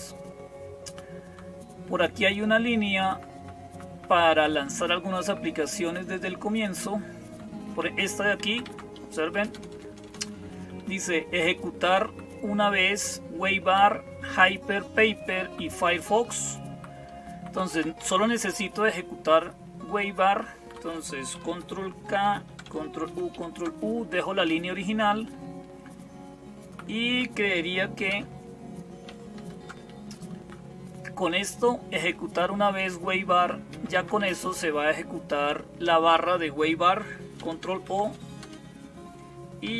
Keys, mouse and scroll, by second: 0.0-39.7 typing, 0.1-1.1 Down, 2.7 Up, 3.0 Up, 3.2 Up, 3.5 Up, 3.8 Up, 4.2 Up, 4.4 Up, 4.8 Up, 5.1 Up, 6.3 Down, 7.0 Down, 7.1 Down, 7.1 Down, 7.7 Up, 8.3 Down, 8.5 Down, 9.2 Return, 9.4 Return, 9.6 Return, 9.7 Return, 10.3 Up, 10.5 Up, 10.6 Up, 10.8 Up, 11.7 Right, 11.9 Right, 12.1-17.6 Right, 17.6 Up, 17.8 Down, 18.4 Left, 19.1 Left, 19.1-21.4 Left, 21.9 ctrl+k, 22.9 ctrl+u, 23.2 ctrl+u, 24.0 Up, 24.6 Delete, 24.8 Delete, 25.2-26.6 Right, 27.9 Return, 29.2 ctrl+k, 30.3 Up, 31.8 Right, 32.0 Right, 32.3 Right, 33.0 Right, 33.2 Right, 33.6 Down, 33.8 Down, 34.3 Delete, 34.5 Delete, 34.7 Delete, 37.6 ctrl+o, 38.3 Return.